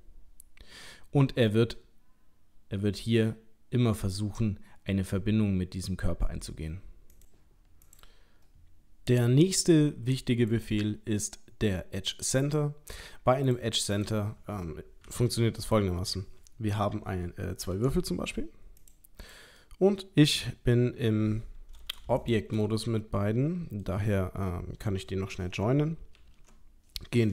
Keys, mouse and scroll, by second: 7.9 click, 10.5 click, 13.5 click, 14.0 click, 15.1 Delete, 15.7 click, 17.8 shift+d, 19.2 click, 19.6 middle click, 22.2 shift+click, 22.6 middle click, 26.2 ctrl+j.